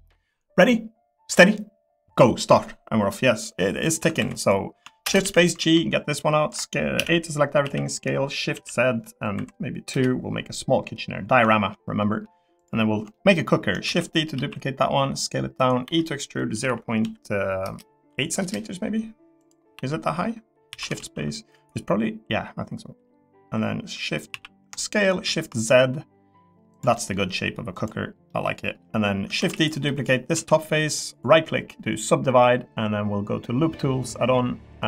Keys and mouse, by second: 3.8 click, 4.0 Tab, 4.2 3, 4.4 click, 5.0 shift+space, 6.9 a, 7.6 s, 8.5 shift+z, 9.3 2, 9.9 Return, 10.7 click, 11.5 shift+middle click, 12.0 middle click, 13.1 shift+middle click, 13.8 shift+d, 14.3 s, 15.8-18.1 typing, 18.4 Return, 19.7 l, 20.7 s, 21.0 shift+z, 24.3 s, 25.2 shift+z, 26.7 click, 26.9 middle click, 27.8 click, 28.3 middle click, 29.4 shift+d, 29.8 click, 30.3 s, 34.0 click.